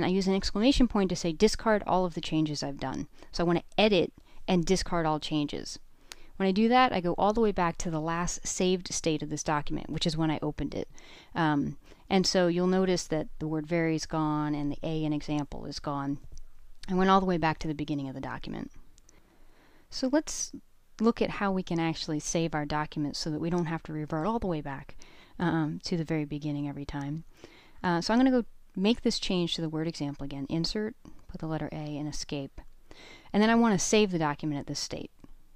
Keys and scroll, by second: 5.2 Return, 24.6-26.8 typing, 28.6-30.7 typing, 33.6 Escape.